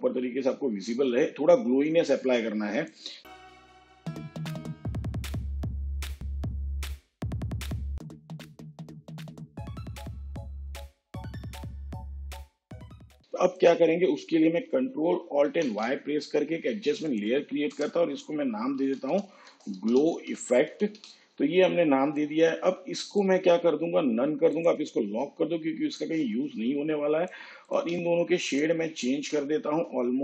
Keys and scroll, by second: 15.5 ctrl+alt+y, 17.8 Return, 18.7-21.1 typing.